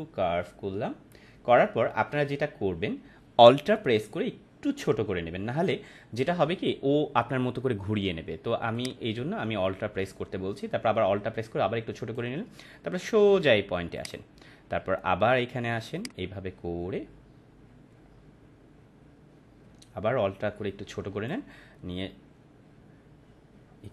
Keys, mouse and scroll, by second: 8.7-12.2 drag.